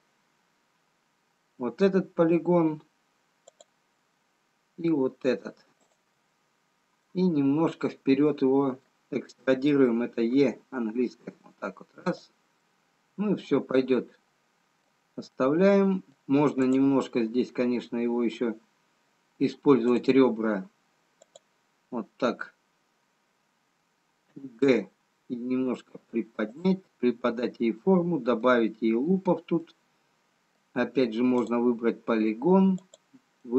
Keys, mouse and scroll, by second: 3.7 click, 5.9 shift+click, 7.6 middle click, 13.1 e, 16.0 middle click, 17.4 click, 17.4 scroll up 1, 20.4 click, 21.7 click, 24.5 g, 29.6 middle click, 29.6 scroll down 1, 32.7 click.